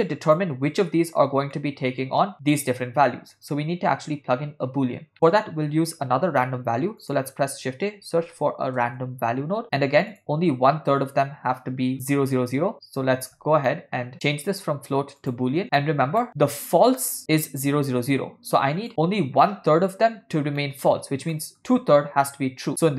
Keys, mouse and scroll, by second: 0.0 click, 1.6 middle click, 5.1 middle click, 6.5 shift+a, 11.9-13.5 drag, 13.7 ctrl+middle click, 14.1-15.5 drag, 15.8 ctrl+middle click, 17.6-18.9 drag, 20.6 middle click, 21.4 ctrl+middle click, 22.7-22.9 drag.